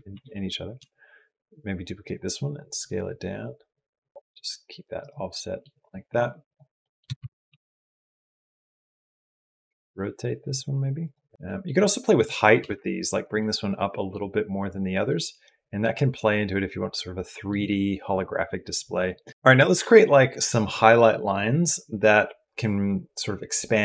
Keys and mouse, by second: 4.1 s, 5.2 click, 6.3 click, 6.6 click, 7.2 shift+d, 8.7 r, 11.3 click, 12.6 g, 13.2 click, 14.8 middle click, 14.9 click, 17.2 click, 19.1 click.